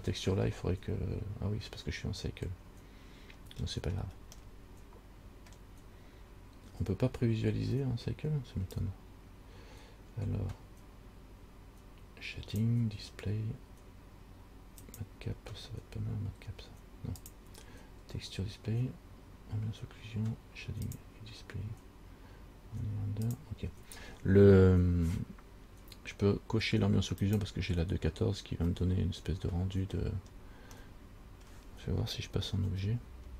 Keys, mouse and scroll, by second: 3.6-4.5 scroll down 5, 4.7 middle click, 6.3 scroll up 3, 9.1 click, 15.0 click, 17.4 click, 21.1 click, 23.5 click, 27.4 click, 29.0 middle click, 30.5-30.9 scroll down 2, 31.0 middle click, 31.7 scroll down 1, 32.8 Tab.